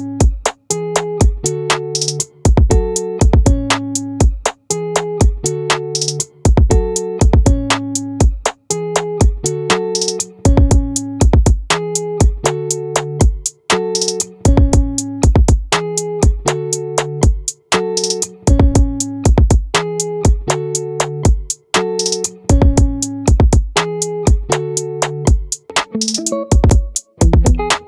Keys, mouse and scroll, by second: 4.6-6.4 middle drag, 9.8 Tab, 22.0 z, 24.8 middle click.